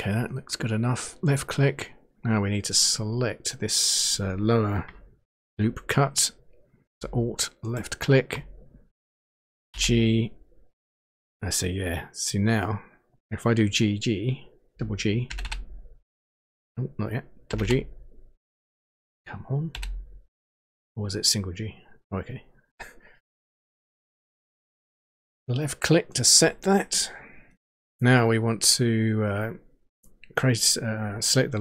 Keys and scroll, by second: 9.7 g, 15.3 g, 17.4 g, 19.7 g.